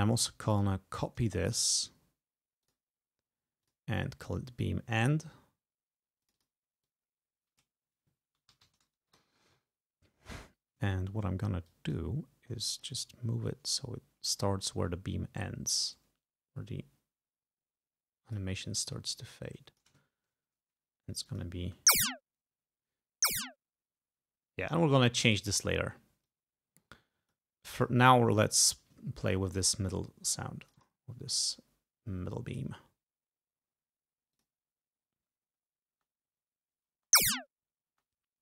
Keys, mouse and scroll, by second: 0.5 click, 1.2 right click, 2.7 click, 3.7 click, 6.3 click, 6.9 click, 8.2-9.2 typing, 11.0 ctrl+scroll up 2, 11.7 click, 12.8-14.5 drag, 14.6-15.0 ctrl+scroll up 2, 15.5-18.6 drag, 19.0-20.1 drag, 20.2-20.5 ctrl+scroll down 2, 21.3 click, 21.7 space, 24.4 space, 25.3 click, 26.3-27.5 drag, 27.8 click, 30.7 click, 32.6 click, 34.4 click, 35.9 space, 37.0 space, 37.9 space.